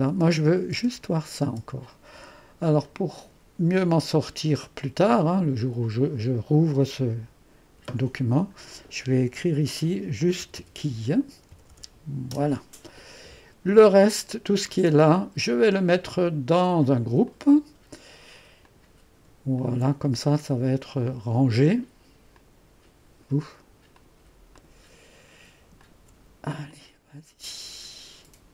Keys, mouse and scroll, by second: 0.2 space, 0.8 space, 1.5 space, 5.1-7.8 drag, 7.8 F2, 10.1-12.2 typing, 12.3 Return, 17.3-23.7 drag, 24.0-25.1 drag, 25.9 click, 26.8-28.5 drag.